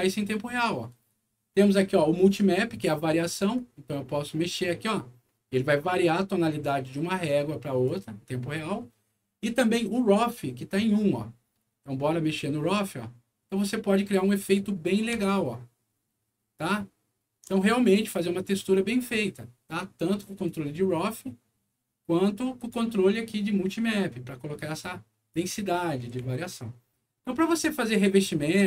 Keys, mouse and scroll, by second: 3.5-7.8 drag, 10.9-14.4 drag, 15.1-17.2 alt+middle drag, 18.4 alt+scroll up 1, 18.9 alt+scroll down 1, 20.4-22.6 drag, 23.3-25.2 drag, 26.4-27.4 alt+middle drag, 27.9 alt+middle click.